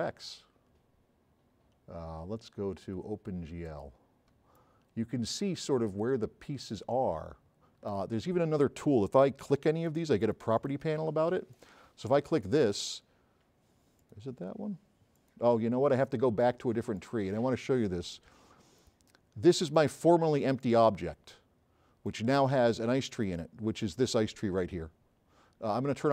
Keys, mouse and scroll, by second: 3.7 click, 4.4 s, 4.6 right click, 7.5-8.0 right drag, 9.6 click, 14.0 click, 15.2 drag.